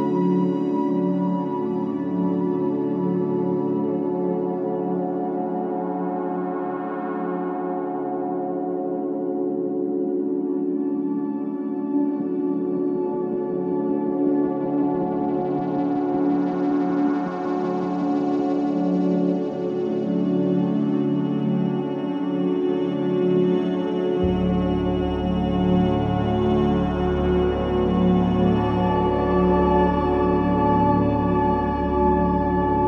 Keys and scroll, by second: 11.6 ], 15.2 ], 16.2 ], 28.8 ].